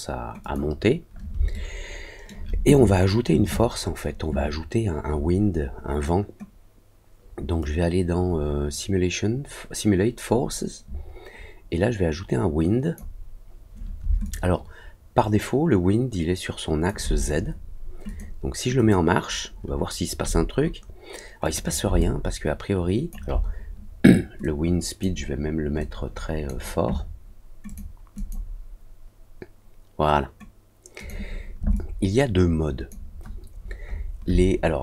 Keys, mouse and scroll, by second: 0.4 click, 1.5 alt+middle click, 7.5-12.9 drag, 14.2-16.8 alt+drag, 18.0 click, 18.7 click, 21.4 click, 21.9-23.0 alt+drag, 24.4 click, 25.7 click, 27.6 click, 28.1 click, 30.9 click, 31.7-32.8 alt+drag, 33.5 alt+middle click, 33.8 alt+middle click.